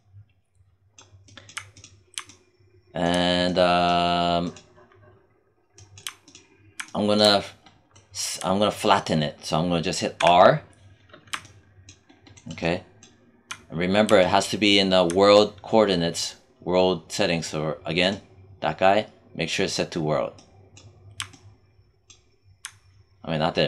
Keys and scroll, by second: 10.1 r.